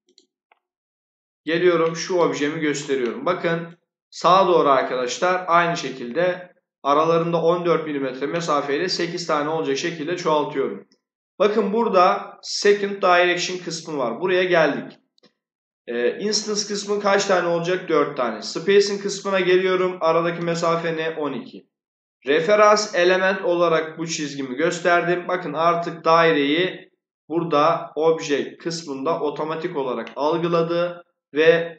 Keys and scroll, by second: 16.9 4, 20.1 1.